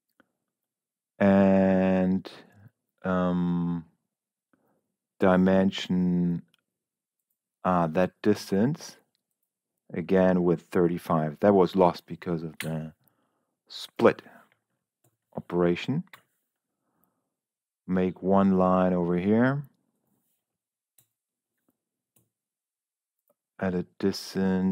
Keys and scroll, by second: 11.3 3, 11.6 5, 12.5 Return, 14.9 Escape, 16.0 l, 21.3 Escape, 22.1 d.